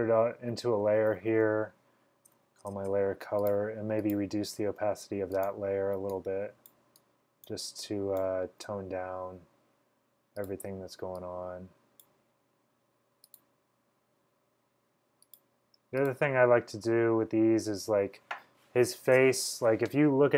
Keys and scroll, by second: 0.9-3.0 typing.